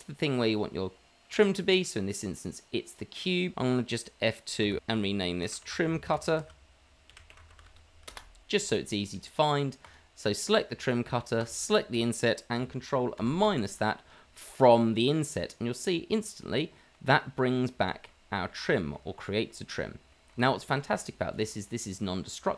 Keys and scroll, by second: 4.6 F2, 5.6 F2, 6.6 F2, 7.4 t, 13.6 KP_Subtract.